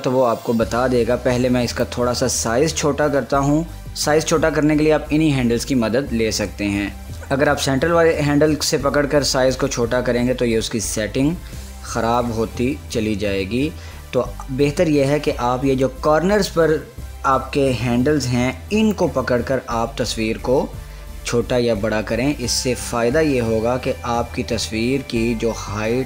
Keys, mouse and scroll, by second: 1.9 click, 6.9-12.9 drag, 12.9 ctrl+z, 13.1 typing, 19.1-26.0 drag, 25.2 typing.